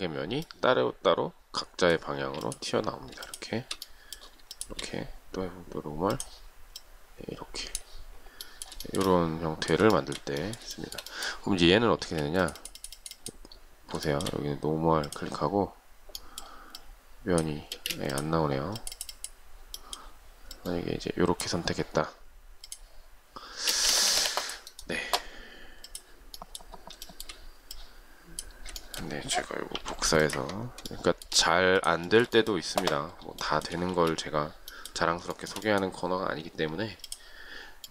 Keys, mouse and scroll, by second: 2.0 space, 3.1 shift+click, 4.4 shift+click, 8.7 shift+middle click, 11.8 space, 13.9 shift+middle click, 17.6 space, 23.5 space, 23.6 Escape, 26.9 shift+middle click, 28.6 shift+middle click, 29.6 m, 30.7 shift+middle click, 31.9 shift+middle click, 32.1 shift+double middle click, 33.3 shift+middle click, 33.5 shift+scroll up 1, 33.8 space, 35.2 shift+middle click.